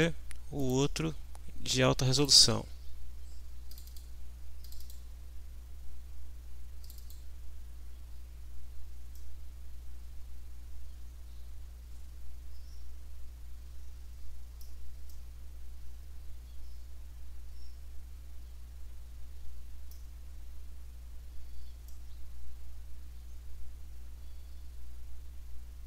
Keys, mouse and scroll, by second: 0.6 click, 2.2 click, 3.7 click, 4.6 click, 6.8 click, 9.2-10.3 middle drag, 10.3-14.8 drag, 14.8 middle click, 15.1-20.1 drag, 21.9-25.8 drag.